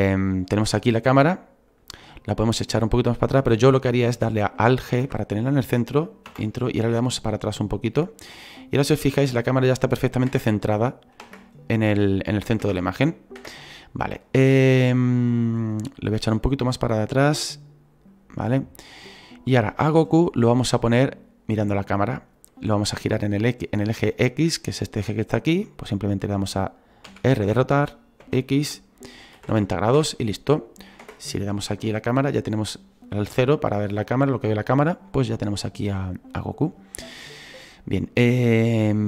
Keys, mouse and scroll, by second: 1.4-2.5 scroll down 1, 2.5-4.9 scroll down 1, 4.9-6.5 scroll down 1, 6.5-7.0 scroll down 1, 7.0-7.9 scroll down 1, 7.9-8.9 scroll down 1, 8.9-10.5 scroll down 1, 11.2 KP_0, 13.4 KP_0.